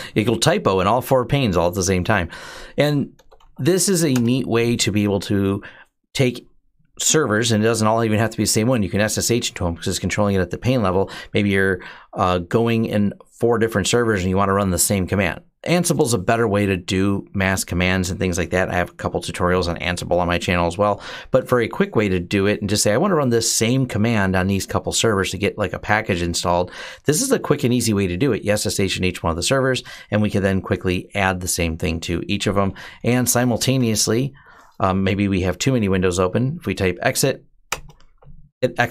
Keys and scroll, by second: 0.0-0.4 typing, 2.7-3.7 typing, 3.9 Return, 18.8 q, 32.5-34.7 typing, 37.5 Return.